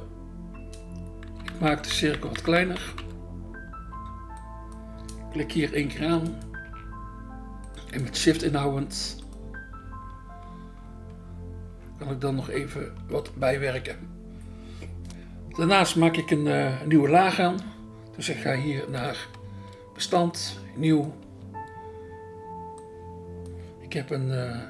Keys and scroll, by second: 1.5 [, 2.1 [, 2.8 [, 19.5 BackSpace, 21.2 BackSpace.